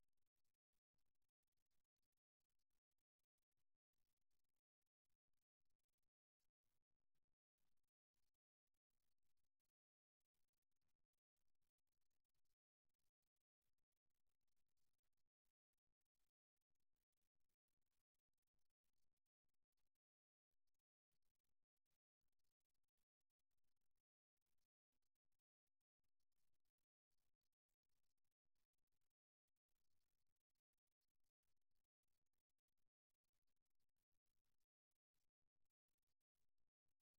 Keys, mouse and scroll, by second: 3.4 e, 6.7-9.8 middle drag, 9.8 KP_1, 10.9-12.8 middle drag, 12.8-14.5 right drag, 14.7-16.1 right drag, 16.7-17.9 right drag, 19.2 right click, 21.0 middle click, 23.0-24.2 right drag, 24.5-26.4 right drag, 32.5-33.5 right drag, 32.5 f, 35.6 f.